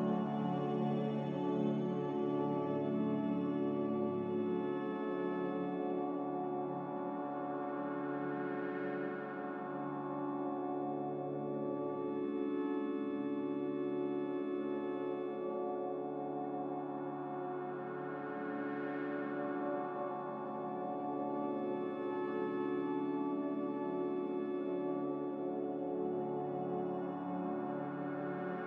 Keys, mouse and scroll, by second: 6.5 typing, 6.8 Return, 7.5 Return, 11.6 typing, 11.8 Return.